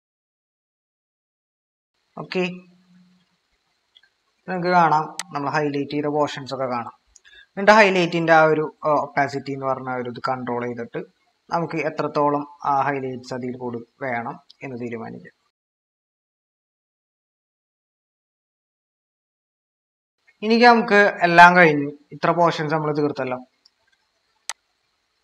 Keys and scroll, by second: 0.6-1.3 typing, 3.5 ctrl+=, 3.7 ctrl+-, 23.5 ctrl+=.